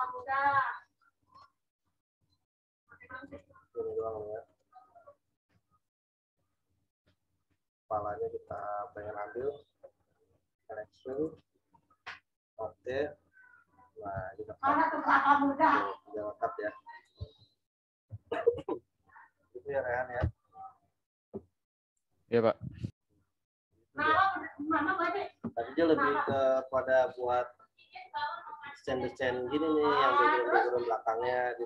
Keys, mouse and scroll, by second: 5.5 ctrl+z, 6.3 shift+click, 14.1 v, 14.9 click, 17.3 ctrl+z.